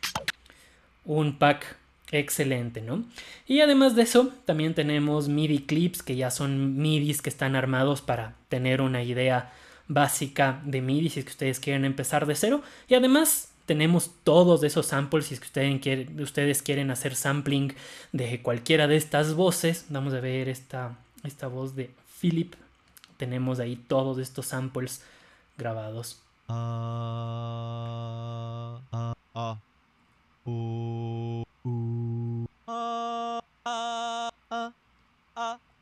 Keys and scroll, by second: 29.0 Down, 30.0 Down, 31.2 Down, 32.3 Down, 33.2 Down, 34.1 Down, 34.9 Down, 35.6 Down.